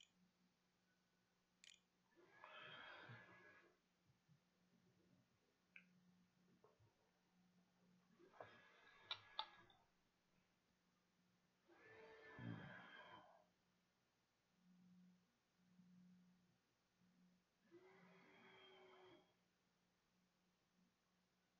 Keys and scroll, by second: 0.4 ctrl+a, 1.2 ctrl+s, 6.0 a.